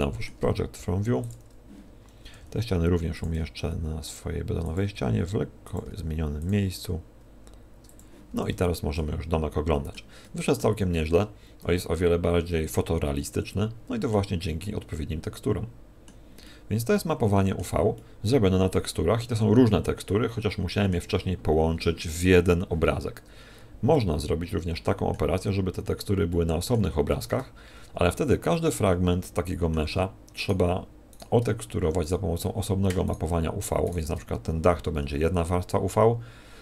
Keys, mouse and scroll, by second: 0.8 u, 2.3 g, 3.3 s, 4.8 click, 4.8 g, 5.8 s, 6.8 click, 6.8 g, 8.1 click, 8.3 a, 8.5 z, 8.9 middle click, 10.2 middle click, 10.9 middle click, 14.6 middle click, 16.5 middle click, 17.9 middle click, 20.0 middle click, 28.5 middle click, 30.4 right click, 31.1 right click, 32.0 shift+right click, 33.1 shift+right click, 33.8 shift+right click.